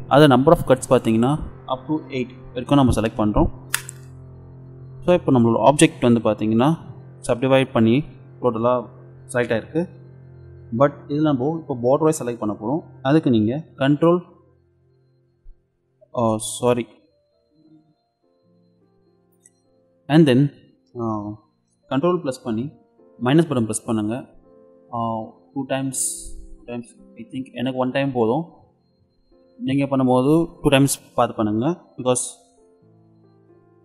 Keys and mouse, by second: 27.2 ctrl+KP_Add, 32.4-33.8 middle drag.